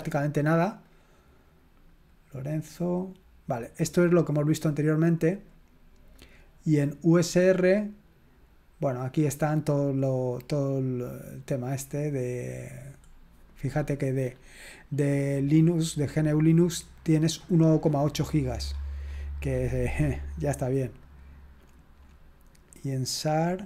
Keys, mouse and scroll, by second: 0.8 click, 7.5 click, 12.9-13.8 scroll down 4, 13.8-15.6 scroll up 3, 17.5-18.7 scroll down 4, 18.7-20.1 scroll up 3, 20.1-20.5 scroll up 1, 21.2 click, 23.0 click.